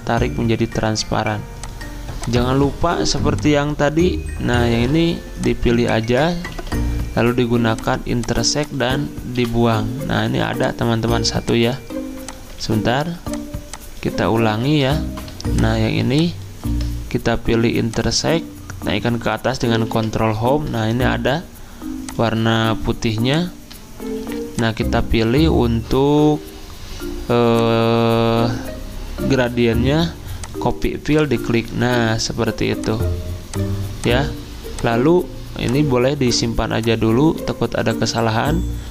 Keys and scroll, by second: 6.5 ctrl+z, 9.3 Delete, 12.6 ctrl+z, 14.6 ctrl+z, 16.6 ctrl+z, 19.8 ctrl+Home, 38.8 ctrl+c.